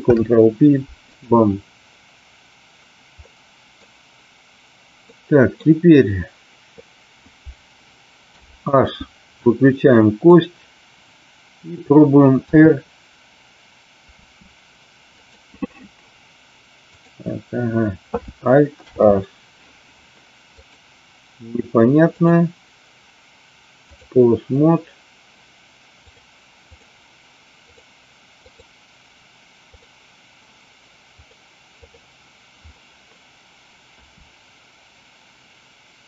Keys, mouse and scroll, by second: 0.0 ctrl+p, 3.1 middle click, 5.1 middle click, 8.4 h, 9.4-10.2 middle drag, 12.4 r, 14.0 r, 15.1 click, 17.0 click, 18.7 alt+h, 22.1-24.0 drag, 26.1 click, 28.4 click, 29.7 click, 31.3 click, 34.0 r.